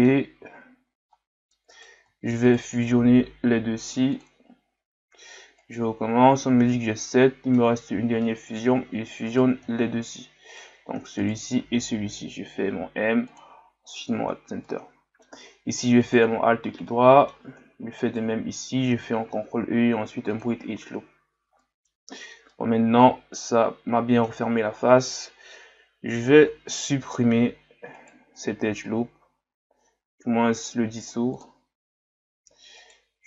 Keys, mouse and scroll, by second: 0.6-1.0 scroll up 1, 1.1 middle click, 1.7 right click, 2.5 shift+right click, 5.6 alt+right click, 6.7-7.9 middle drag, 7.9-8.2 scroll down 2, 8.2-9.3 middle drag, 9.3 right click, 10.5 right click, 11.2 shift+right click, 12.4 m, 14.3 scroll down 2, 14.6-16.0 middle drag, 16.0 alt+right click, 16.6 scroll down 2, 16.9-18.0 middle drag, 18.0 alt+shift+right click, 19.3 ctrl+e, 21.3 scroll down 2, 21.6 middle click, 22.0-22.5 scroll up 2, 22.5-24.6 middle drag, 24.6-25.5 scroll down 1, 25.5-27.0 scroll down 1, 27.0-28.0 scroll up 2, 28.0 alt+right click, 32.8 alt+right click.